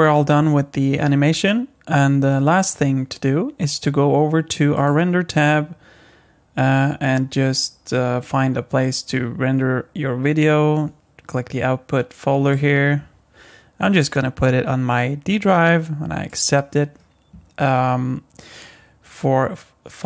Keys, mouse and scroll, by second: 4.8 click, 12.4 click.